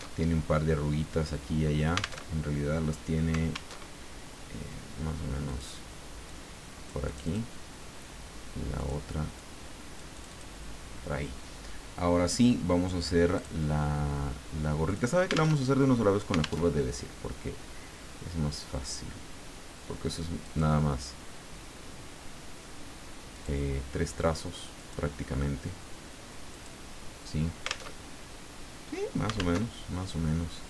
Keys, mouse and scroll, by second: 0.1 alt+Tab, 2.2 alt+Tab, 3.7 alt+Tab, 5.5 click, 6.2-7.6 drag, 8.8 click, 9.3-10.5 drag, 13.3 click, 14.9 click, 15.5 alt+Tab, 16.6 alt+Tab, 20.4 click, 23.3-24.5 drag, 24.7 click, 26.4 click, 28.0 alt+Tab, 29.6 alt+Tab.